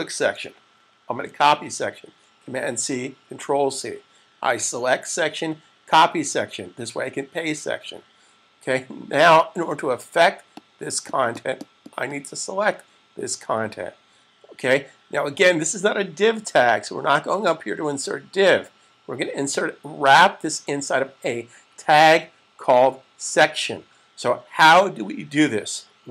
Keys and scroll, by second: 1.1 super+c.